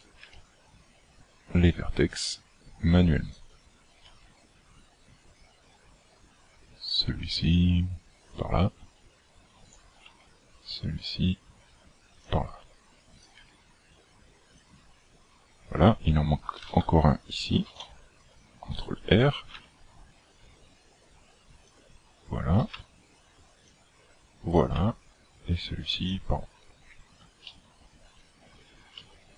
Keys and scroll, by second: 0.4 g, 4.2 g, 10.3 g, 13.6 g, 16.7 ctrl+r, 19.6 g, 23.0 g, 25.0 g.